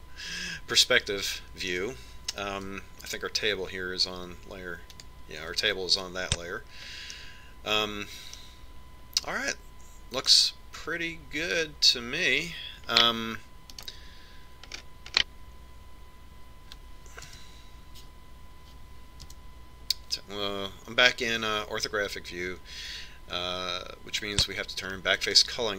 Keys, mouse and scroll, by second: 6.2 click, 8.5-10.2 middle drag, 10.5-12.3 middle drag, 13.0-14.7 right drag, 15.2-16.7 right drag, 16.1-18.5 middle drag, 18.7 KP_7, 20.6 KP_5, 24.3 click.